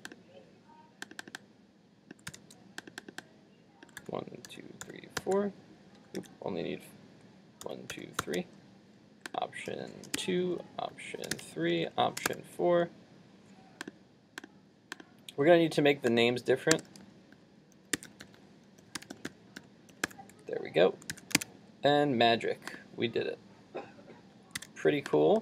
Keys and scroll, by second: 2.3 super+c, 4.1 super+v, 5.2 super+v, 6.2 super+z, 7.8 super+v, 21.1 super+s, 21.5 super+Tab, 24.6 super+w.